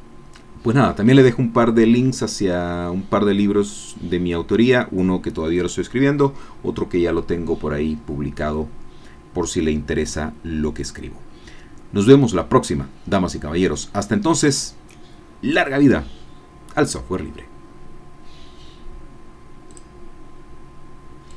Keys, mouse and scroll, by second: 19.7 click, 21.3 click.